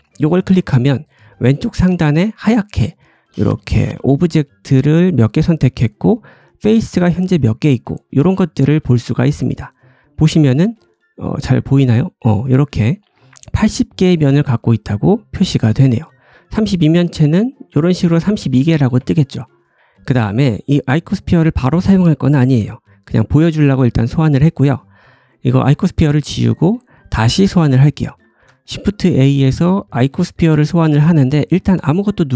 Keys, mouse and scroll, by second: 0.0-8.6 drag, 8.6-12.7 middle drag, 12.7-13.9 drag, 13.9-16.2 middle drag, 15.6 Tab, 16.2 click, 16.3-17.3 middle drag, 16.5 Tab, 17.3-19.4 drag, 18.9 Tab, 19.4-20.4 middle drag, 20.4 click, 20.5 middle click, 20.7 click, 20.8-23.7 middle drag, 24.3 click, 24.9 click, 25.6 typing, 26.5 middle click, 28.3 shift+a, 29.5-32.3 middle drag.